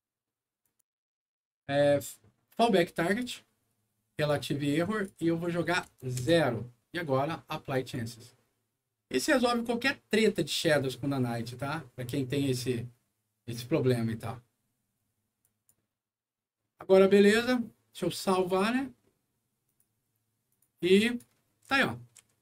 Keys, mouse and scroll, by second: 0.5 click, 3.0 click, 4.2 click, 4.9 click, 5.8 KP_0, 6.1 Return, 7.6 click, 15.3 click, 18.3 click, 19.6 click, 20.4 click, 21.0 click, 21.5-22.4 right drag, 21.6 d.